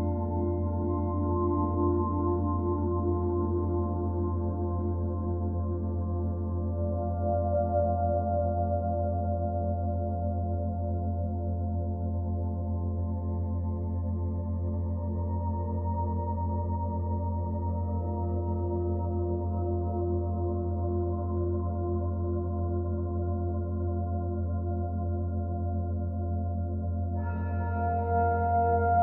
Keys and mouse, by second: 0.6 Left, 1.0 Left, 1.1 Left, 1.2 Left, 1.3 Left, 1.6 Left, 1.7 Left, 2.1 Right, 3.5 i, 4.4 click, 5.5-6.6 drag, 6.8 click, 8.1 Left, 8.4 Left, 8.6 Left, 8.8 Left, 9.2 Left, 9.5 Left, 10.7 i, 11.1 click, 12.5 click, 13.6-19.9 typing, 14.2 Return, 15.0-16.4 drag, 17.0-19.1 drag, 21.0-22.1 ctrl+alt+drag, 22.1 ctrl+s, 23.5 click, 24.9-27.0 drag, 27.9 Left, 28.9 Left.